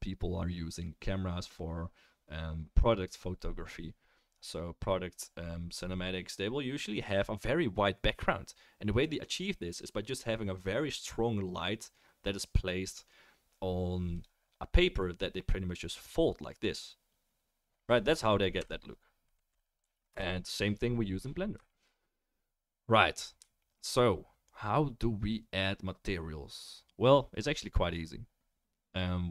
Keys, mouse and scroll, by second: 14.2-18.9 drag, 18.5 Right, 20.1 KP_0.